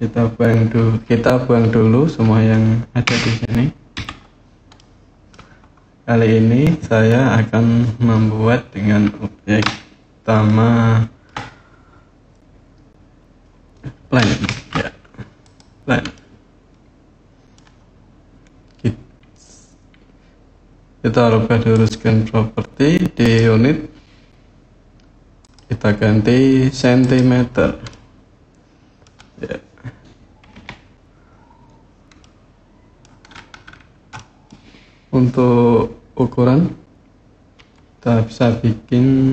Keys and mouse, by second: 2.9 a, 3.7 Delete, 4.5-5.1 drag, 14.2 shift+a, 15.9-17.3 middle drag, 21.6 click, 23.0 click, 25.3-26.9 drag, 27.7-28.8 drag, 30.3 n, 32.0-32.8 drag, 33.9-34.3 middle drag, 37.3 KP_7, 39.1-39.3 drag.